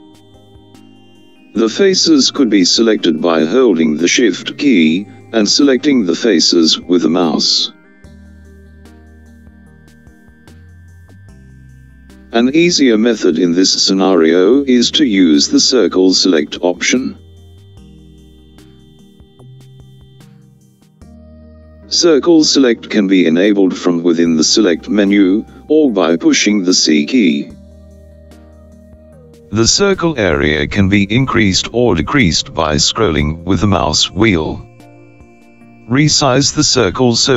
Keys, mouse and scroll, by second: 5.5 shift+click, 6.6 shift+click, 7.6 shift+click, 8.8 click, 15.1 a, 15.5 a, 24.0-27.8 drag.